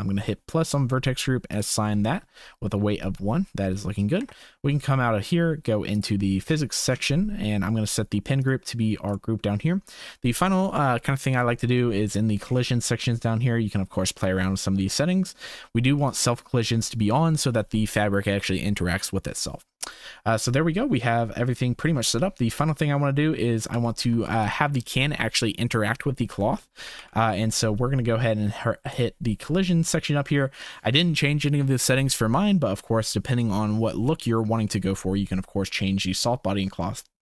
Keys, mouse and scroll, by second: 1.5 click, 4.2 Tab, 9.1 click, 12.0 click, 16.0 click, 20.8 middle click, 21.1 middle click, 21.1-21.9 scroll up 2, 21.5 middle click, 26.5 shift+click, 27.0 ctrl+s, 28.9 click, 34.0-34.4 drag, 34.8 shift+click.